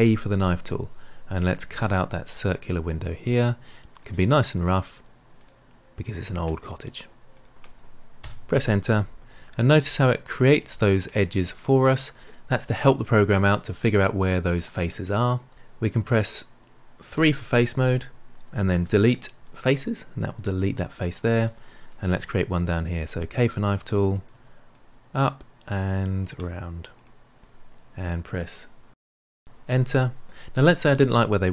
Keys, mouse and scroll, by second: 0.0 k, 17.1 3, 18.7 Delete, 22.9 k.